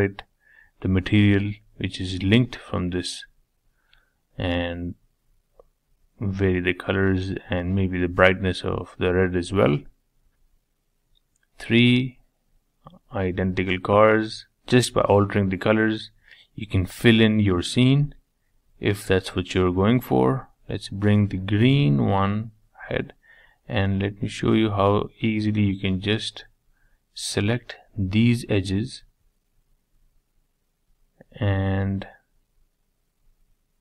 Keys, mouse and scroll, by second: 0.2 click, 1.3-2.5 drag, 6.1 click, 7.6 click, 9.8-11.0 shift+middle drag, 11.0 click, 11.5 middle click, 12.0 scroll up 2, 12.2-15.6 shift+middle drag, 15.6 click, 16.4-18.1 middle drag, 18.1 g, 19.5-20.0 scroll up 3, 20.0 shift+middle click, 20.9 click, 21.4-23.2 middle drag, 24.4 click, 24.8 Tab, 25.1 middle click, 25.7-26.1 scroll up 4, 26.1 shift+middle click, 27.0 2, 27.6 click, 27.9-29.2 middle drag, 29.2 shift+click, 29.9 shift+click, 30.4 shift+click, 31.7 shift+click, 32.0-32.4 scroll up 4, 32.4 shift+middle click, 33.3 shift+click.